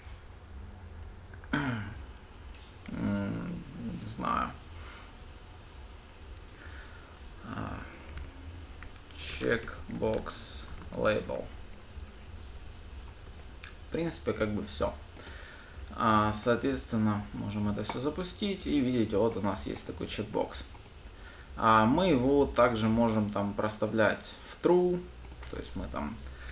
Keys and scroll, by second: 16.7 ctrl+shift+F10, 17.9 ctrl+shift+F10.